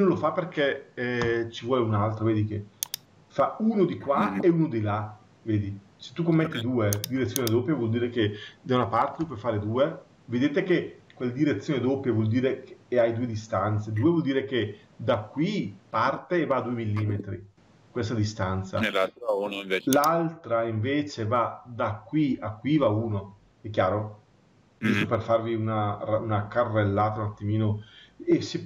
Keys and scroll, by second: 9.1 Return.